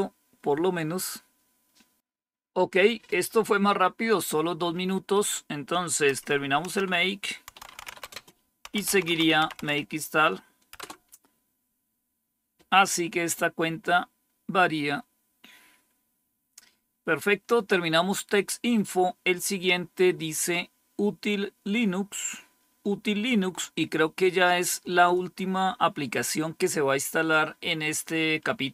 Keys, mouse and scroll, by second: 6.0 Page_Up, 6.2 Up, 6.6 Page_Down, 6.8-10.7 typing, 19.2 click, 25.0-26.2 drag.